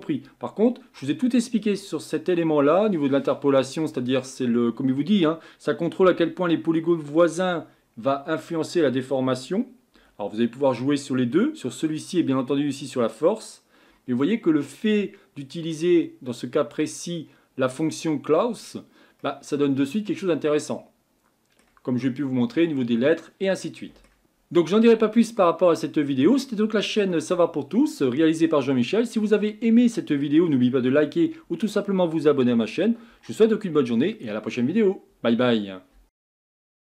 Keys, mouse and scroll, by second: 14.2-16.9 middle drag, 16.9-19.2 drag, 19.2-24.2 middle drag.